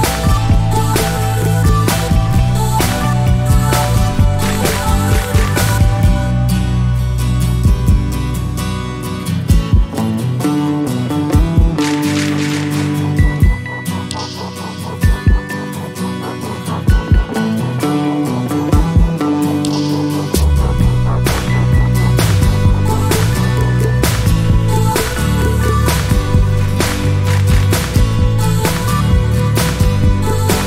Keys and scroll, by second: 14.9 1, 24.2-25.2 typing.